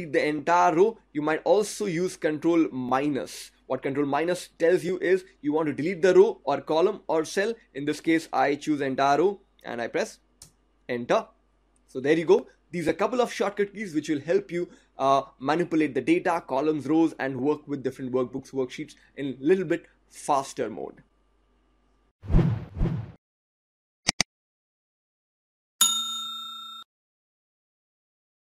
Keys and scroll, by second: 2.9 ctrl+-.